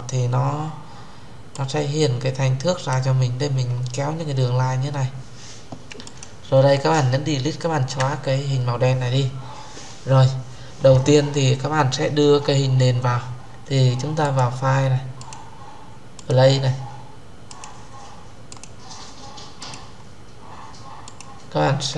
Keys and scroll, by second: 7.8 Delete.